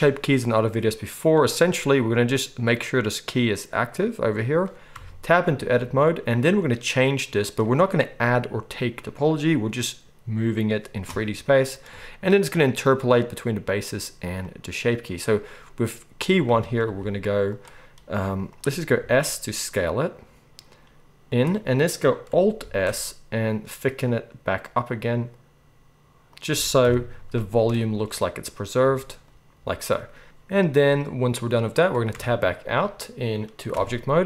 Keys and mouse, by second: 5.0 Tab, 16.9 z, 17.6-21.5 middle drag, 18.2 z, 19.0 s, 22.6 alt+s, 26.8 KP_1, 27.9-34.2 middle drag, 33.7 Tab.